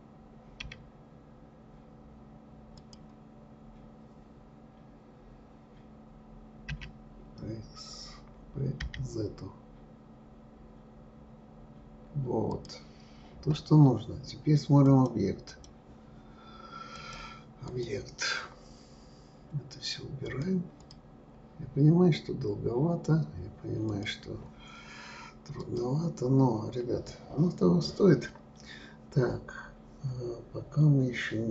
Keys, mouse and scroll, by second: 14.8-17.8 drag, 20.2 click, 20.8 click, 23.9 click, 25.6 click, 31.2-31.5 scroll up 4.